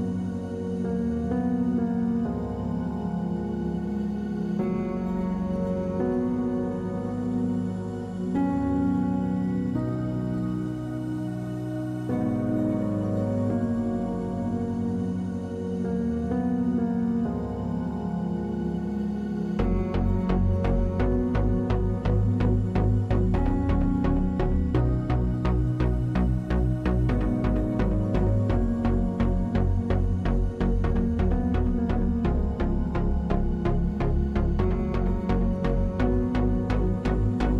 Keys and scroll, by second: 20.8 ctrl+z, 22.6 ctrl+z, 25.5 w.